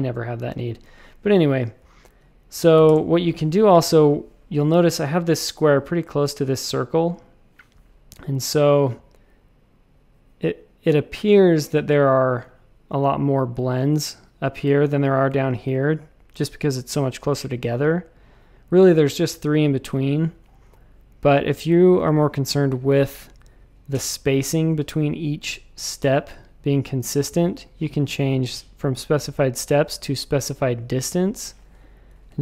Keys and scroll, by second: 0.5 v, 2.7 w, 2.8 Return.